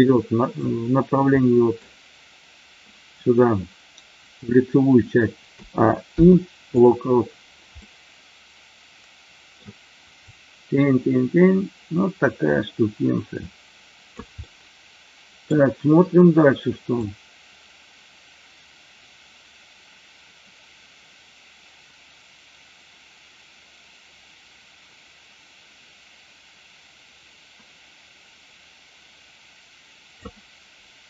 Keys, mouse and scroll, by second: 1.4 middle drag, 5.5 a, 6.0 i, 7.9-9.5 middle drag, 10.3-14.3 drag, 14.4 middle click, 17.0-30.3 drag.